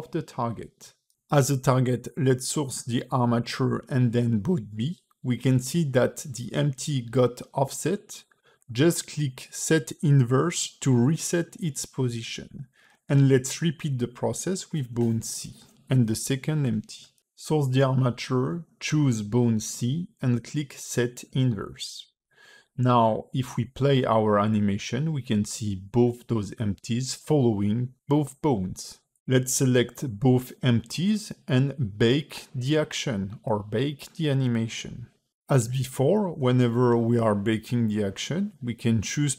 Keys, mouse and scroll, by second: 0.2 click, 2.5 click, 13.5 click, 13.9 click, 15.4 click, 17.5 click, 20.2 click, 23.2 click, 24.0 middle click, 24.7 space, 25.5 scroll down 2, 29.7 space, 30.1 click, 30.8 middle click, 31.5 click, 32.7 shift+click, 33.5 click, 34.4 shift+click, 35.1 q, 39.2 space.